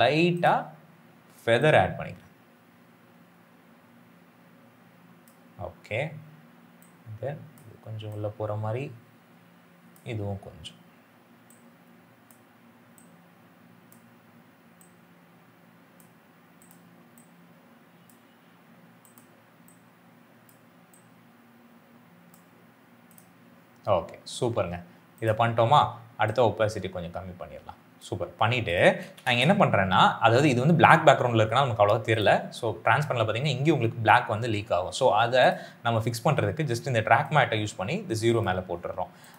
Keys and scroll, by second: 28.9 s, 29.1 s.